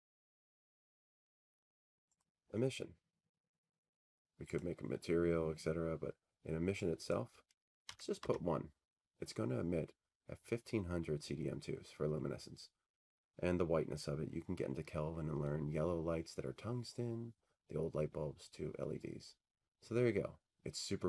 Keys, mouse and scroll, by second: 0.8-2.2 scroll, 0.9-2.2 middle drag, 2.2 scroll down 10, 2.3-7.6 middle drag, 2.3-3.0 scroll, 3.0-4.2 scroll, 4.5 scroll, 5.2-5.9 scroll, 7.8 click, 10.2 click, 12.7 click, 13.6 1, 13.7 Tab.